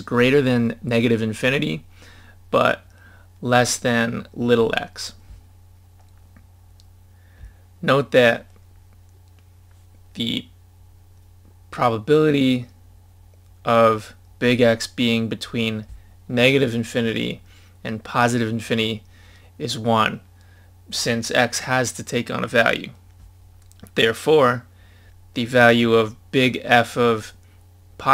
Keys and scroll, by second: 6.4 scroll down 1.